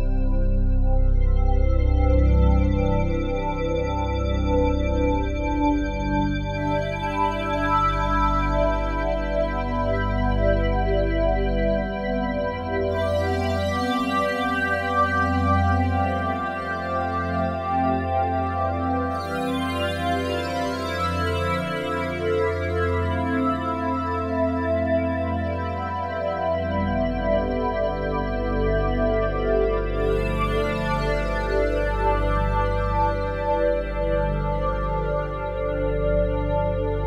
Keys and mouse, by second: 4.2 click, 5.5-8.0 drag, 8.8-10.0 drag, 11.3-13.2 middle drag, 13.6 Delete, 14.2 Delete, 16.5 ., 17.4 Left, 19.8 Right, 20.2 BackSpace, 20.6 BackSpace, 22.3-22.9 typing, 24.7-25.4 typing, 27.0 Return, 29.1-31.3 drag, 31.4 click, 33.0 click, 35.3 click.